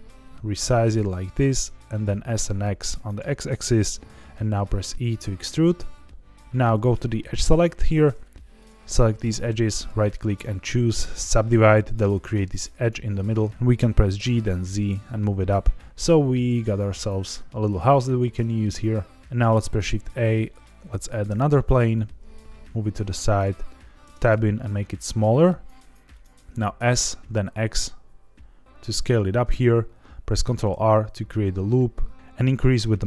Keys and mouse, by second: 0.8 click, 1.1 s, 1.1 x, 3.0 click, 4.8 e, 7.7 click, 9.8-10.8 right drag, 13.5 Escape, 13.5 g, 13.5 z, 14.1 g, 14.4 z, 17.5 click, 19.3 shift+a, 21.2 g, 21.4 x, 23.3 click, 24.0 Tab, 24.3 s, 26.1 click, 26.4 s, 26.7 x, 29.1 click, 30.4 ctrl+r.